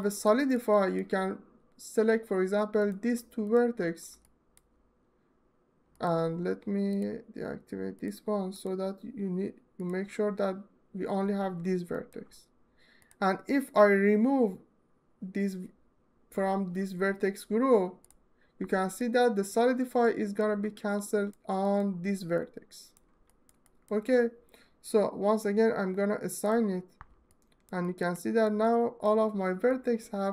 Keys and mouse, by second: 3.9 alt+middle click, 5.6 alt+middle click, 6.6 right click, 7.6 right click, 8.2 right click, 9.4 middle click, 11.6 alt+middle click, 18.7 alt+middle click, 19.7 alt+middle click, 22.2 alt+middle click, 27.0 alt+middle click, 27.7 middle click, 28.0 alt+middle click, 28.3 ctrl+alt+middle click, 29.5 alt+middle click, 29.7 alt+middle click.